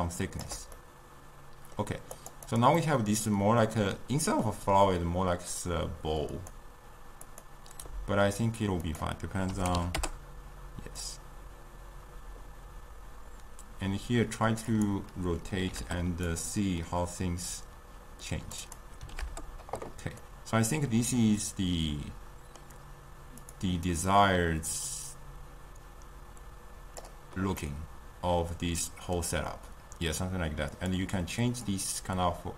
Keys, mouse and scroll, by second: 0.9-2.4 middle drag, 2.4 click, 2.7 click, 2.9-7.3 middle drag, 7.3-20.3 drag, 20.3-24.2 middle drag, 24.2-27.8 drag, 27.8-32.0 middle drag, 32.0-32.5 drag.